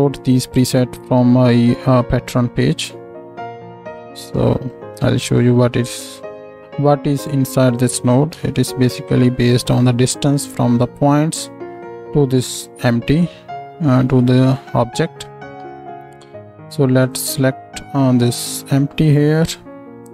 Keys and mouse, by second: 2.2 click, 2.7-4.4 middle drag, 4.4-7.7 drag, 7.7-14.8 middle drag, 8.3 Tab, 14.8 click, 14.9-19.7 middle drag, 15.6 Tab, 19.7-20.1 drag.